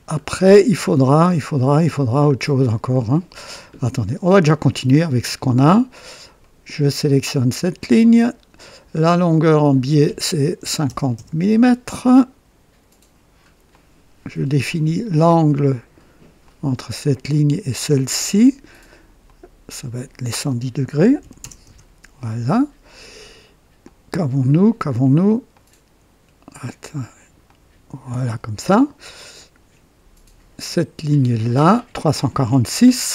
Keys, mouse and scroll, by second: 0.1 scroll up 1, 1.3 scroll down 1, 2.2-3.0 right drag, 3.4 scroll down 1, 4.1-4.7 right drag, 5.6 right click, 6.4 right click, 7.5 click, 9.4 click, 10.6 KP_5, 10.8 KP_0, 11.1 Return, 13.7-15.0 drag, 16.4 click, 17.5 click, 19.2 click, 21.0 KP_1, 21.2 KP_1, 21.4 KP_0, 21.6 Return, 23.8-24.7 drag, 25.5-26.3 drag, 27.4-28.4 drag, 28.8-29.5 right drag, 29.3 typing, 31.4 click.